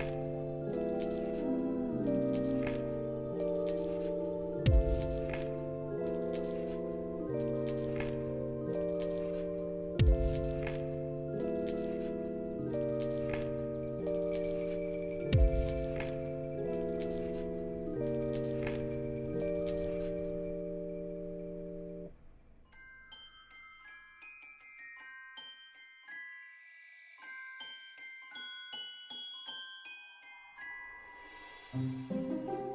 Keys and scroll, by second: 6.3 alt+x, 11.6 ctrl+s, 13.0 ctrl+c, 13.2 ctrl+v, 14.0 ctrl+c, 14.2 ctrl+v, 14.9 ctrl+c, 15.0 ctrl+v, 16.2 x, 19.4 ctrl+c, 19.5 ctrl+v, 20.3 ctrl+c, 20.4 ctrl+v, 21.5 ctrl+v, 23.5 x, 25.1 ctrl+c, 25.3 ctrl+v, 26.1 ctrl+c, 26.3 ctrl+v, 27.1 ctrl+c, 27.4 ctrl+v, 28.0 x, 30.1 ctrl+c, 30.2 ctrl+v, 31.0 ctrl+c, 31.1 ctrl+v, 32.0 ctrl+c, 32.2 ctrl+v.